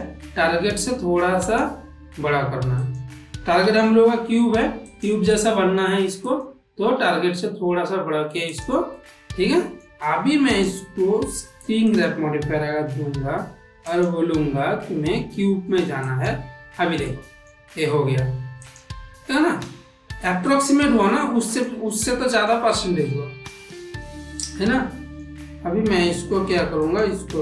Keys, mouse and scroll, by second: 0.5 s, 2.7 click, 3.5 g, 5.2-5.8 middle drag, 6.9 s, 9.0 middle click, 10.4-11.9 drag, 13.8-16.1 drag, 16.9 middle click, 18.5 click, 19.2-21.5 middle drag, 21.9-22.4 ctrl+middle drag, 22.6-25.1 middle drag, 26.7-27.4 drag.